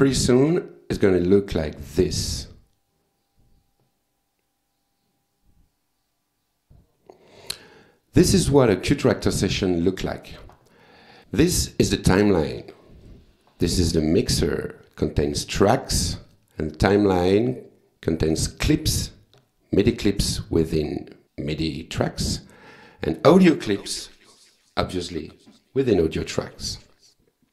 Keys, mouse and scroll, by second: 0.2 click, 2.3 click, 11.2 click, 13.1 click, 14.2 click, 15.4 click, 16.3 click, 17.3 click, 18.4 click, 23.2 click, 27.1 click.